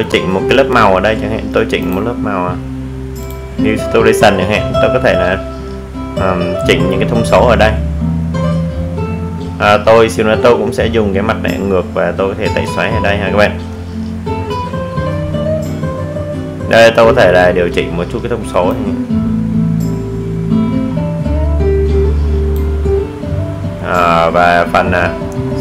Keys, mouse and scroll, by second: 1.5 click, 18.8-25.6 drag.